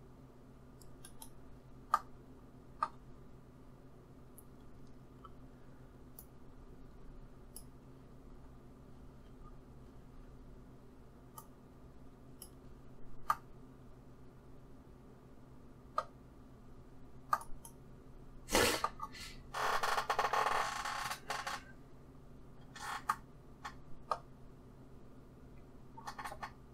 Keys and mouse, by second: 2.8-5.7 middle drag, 6.1-8.0 drag, 8.2-11.3 middle drag, 11.3-13.1 drag, 13.2-26.7 middle drag.